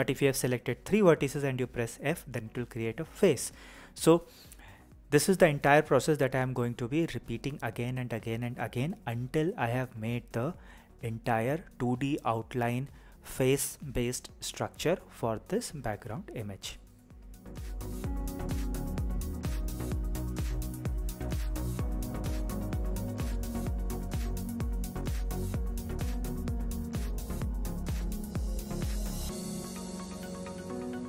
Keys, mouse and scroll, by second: 0.6 f, 5.6 click, 5.9 g, 6.2 click, 6.3 shift+middle click, 7.4 click, 7.5 click, 7.7 click, 7.9 e, 8.7 click, 8.8 click, 9.1 right click, 9.3-12.9 typing, 9.6 click, 10.1 shift+click, 10.6 shift+middle click, 10.9 click, 11.3 click, 11.4 shift+click, 11.7 click, 12.3 click, 12.5 shift+click, 12.7 shift+click, 16.0 shift+middle click, 16.2 shift+middle click, 16.5 shift+middle click, 16.9 shift+middle click, 17.4 e, 17.7 click, 18.3 shift+click, 18.5 f, 19.1 click, 19.1 e, 19.5 click, 19.7 f, 19.8 f, 20.0 shift+middle click, 20.4 shift+middle click, 21.9 shift+middle click, 22.4 shift+middle click, 25.5 click, 25.9 click, 26.1 shift+click, 26.2-27.6 typing, 26.3 shift+click, 26.5 click, 27.1 click, 27.6 click, 27.9 click, 28.0 shift+middle click, 28.4 click, 29.0 f, 29.1 shift+click, 29.1 f, 30.7 click.